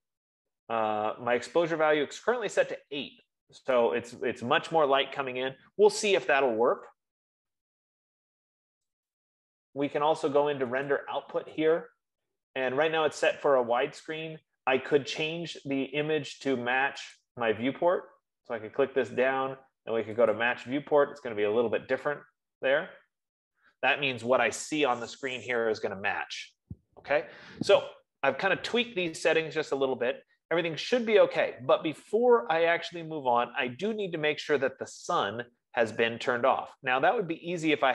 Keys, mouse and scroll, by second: 2.7-4.2 drag, 9.7-11.2 drag, 17.9 click, 20.7 click.